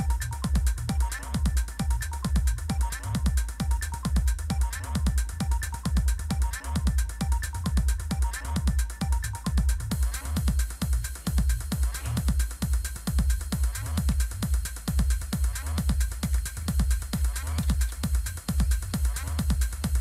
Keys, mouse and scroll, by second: 0.7 Down, 0.9 Down, 3.6 click, 5.6 click, 10.1 click, 11.3 Return.